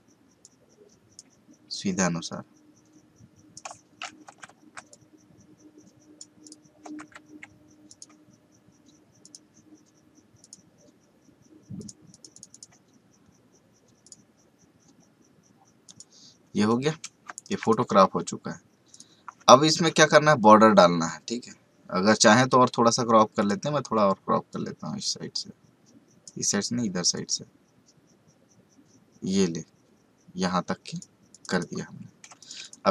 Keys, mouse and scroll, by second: 4.2 Right, 4.8-6.4 drag, 6.8 Right, 7.8 click, 17.3 space, 17.4 right click, 17.6 click, 19.5 alt+scroll down 1, 23.3-31.3 drag, 32.2 space, 32.4 right click, 32.6 click.